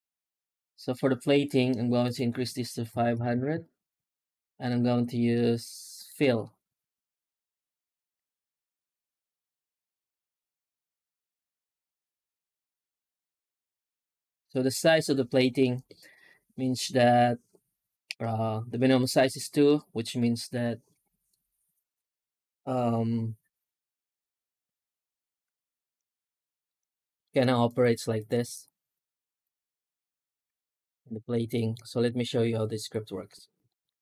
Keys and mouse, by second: 3.2 KP_0, 27.1 shift+middle click, 28.4 shift+a, 30.6 g, 31.0 right click, 31.2 Tab, 31.4 middle click, 31.8 shift+middle click, 32.2 w, 32.6 w, 33.1 w, 33.6 shift+middle click.